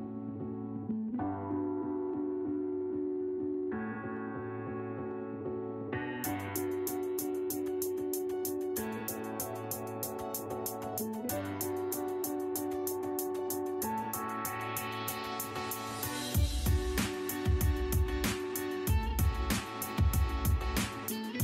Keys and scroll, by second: 7.2 Escape, 8.9 e, 9.0 space, 10.7 space, 14.9 space, 15.0 m, 16.0 ctrl+z, 19.9 m, 20.0 space.